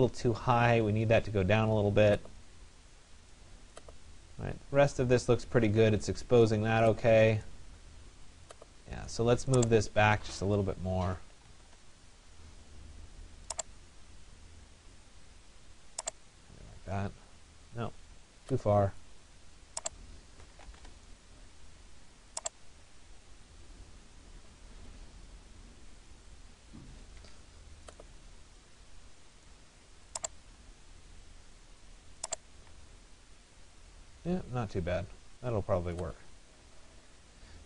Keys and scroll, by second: 11.2 Return, 16.4 Escape, 21.5 Return, 27.5 Escape.